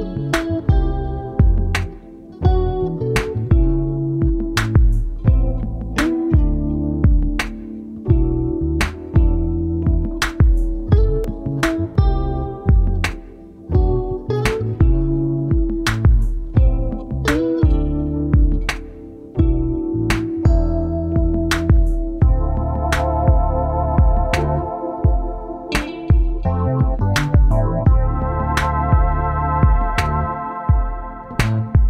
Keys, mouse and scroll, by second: 1.7 ctrl+t, 2.8 shift+click, 13.4-15.3 scroll down 1, 15.3 double click, 17.6 double click, 17.8-19.5 typing, 20.6 2, 24.2 double click, 27.4 double click, 31.3-31.8 typing.